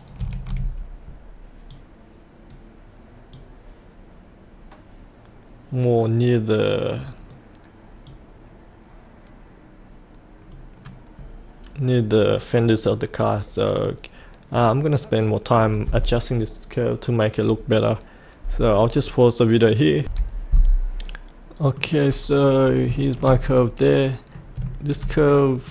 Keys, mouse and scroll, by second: 1.7-11.0 drag, 14.4-14.8 scroll up 1, 14.8-20.0 scroll down 1, 20.0 F8, 20.5 middle click, 22.1-22.9 scroll up 1, 22.9-24.4 shift+middle drag, 24.7 shift+middle click.